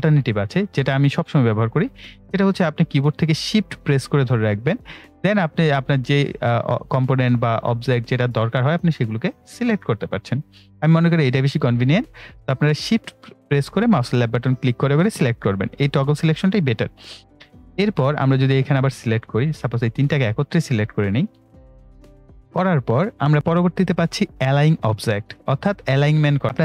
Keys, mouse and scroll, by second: 0.0 right click, 0.9-23.3 drag.